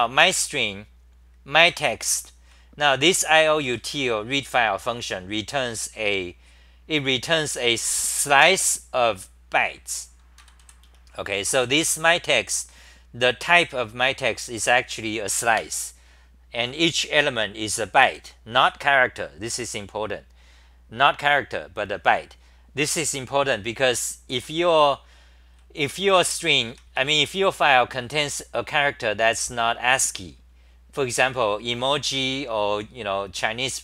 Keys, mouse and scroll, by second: 2.0 ctrl+g, 2.0-4.4 typing, 10.4-11.6 typing, 24.3 ctrl+g, 26.4-27.6 typing, 31.0 ctrl+g.